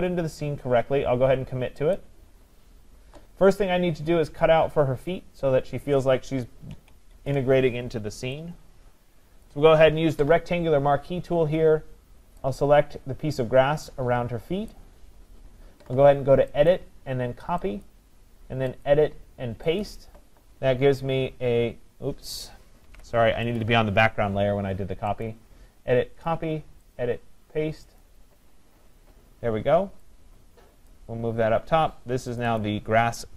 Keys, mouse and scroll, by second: 2.0 click, 6.7 ctrl+=, 7.1 ctrl+=, 8.8-9.7 scroll, 9.5 click, 14.7 click, 16.7 click, 17.9 click, 19.8 click, 19.9 click, 22.9 ctrl+z, 23.6 click, 25.3 click, 26.3 click, 27.0 click, 28.0 click, 30.9 click, 32.4 click, 32.6 click.